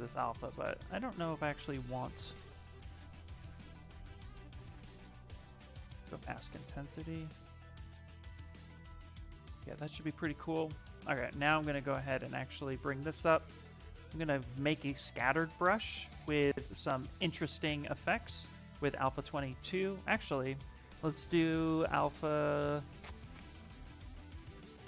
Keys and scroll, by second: 9.1 s, 10.9-12.2 typing.